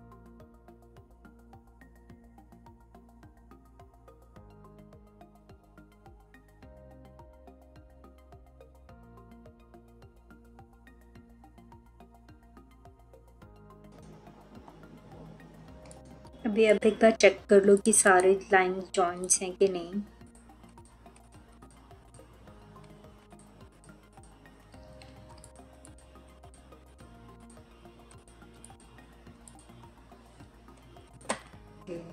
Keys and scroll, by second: 1.5 3, 2.2 ctrl+z, 4.2 3.